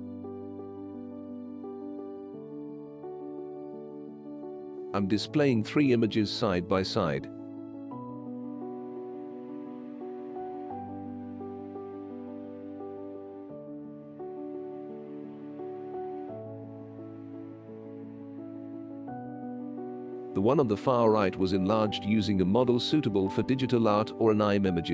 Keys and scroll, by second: 1.1 Delete.